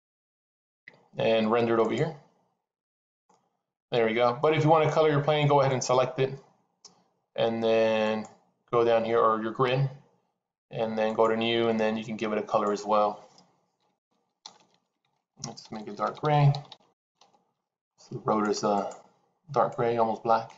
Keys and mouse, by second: 0.0 click, 2.6 click, 3.2-5.2 middle drag, 5.6 click, 8.0 click, 10.9 click, 12.4-18.6 drag, 14.4 BackSpace, 14.9 d, 15.8 BackSpace, 18.7 click.